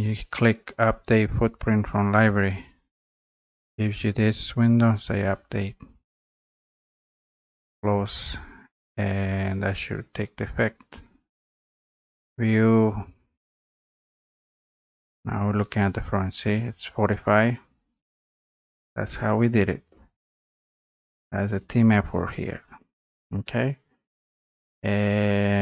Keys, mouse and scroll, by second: 2.5-5.1 drag, 7.8 click, 11.2 click, 12.1 click, 13.5 click, 16.2 click, 16.5 scroll up 1, 16.6-17.1 scroll, 17.1 scroll up 5, 17.3 scroll, 18.2 click, 18.2 scroll down 4, 19.3 click, 19.5-19.9 scroll up 3, 19.9-20.3 scroll down 2, 21.6 click, 23.2 click, 23.5 scroll up 2, 24.0-24.3 scroll down 2.